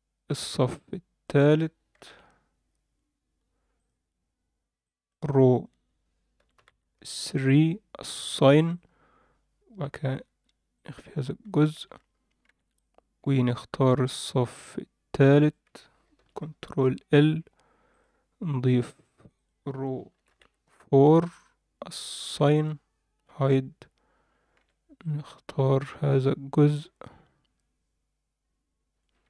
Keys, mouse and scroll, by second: 2.0 ctrl+l, 3.8 click, 4.8 click, 5.5-7.4 drag, 8.6 click, 10.0 h, 10.8 click, 11.0-11.4 scroll down 1, 11.4 a, 12.4 c, 16.2 ctrl+l, 17.9 click, 19.3-21.0 drag, 22.2 click, 23.3 h, 23.6-24.5 scroll down 1, 24.5 c.